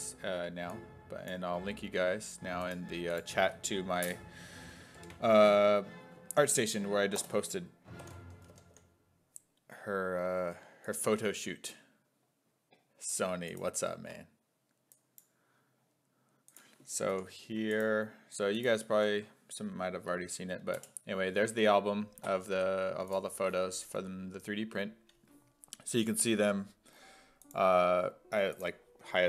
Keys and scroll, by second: 5.0 ctrl+v, 6.3 ctrl+a, 7.2 BackSpace, 8.0 ctrl+t, 8.4 a, 8.7 t, 17.1 ctrl+c, 17.3 ctrl+c, 19.0 ctrl+v, 20.8 Return.